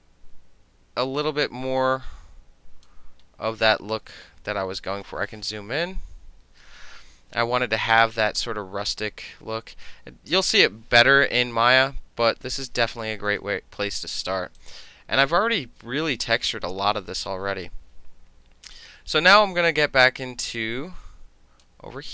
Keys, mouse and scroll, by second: 2.9-4.0 middle drag, 5.8 ctrl+=, 6.2 ctrl+=, 8.0-10.4 drag, 11.5 ctrl+-, 12.4 ctrl+-, 12.8-14.6 middle drag, 14.6 click, 20.9 click.